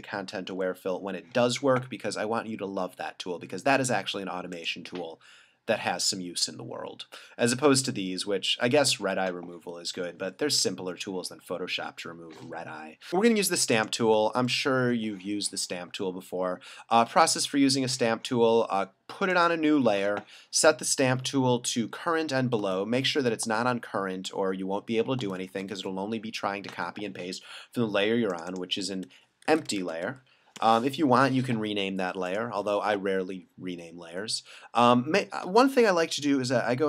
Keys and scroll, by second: 0.5 l, 1.0 l, 14.6 alt+super+-, 21.0 alt+super+=, 25.8 alt+super+-, 29.2-30.5 typing, 30.7 Return.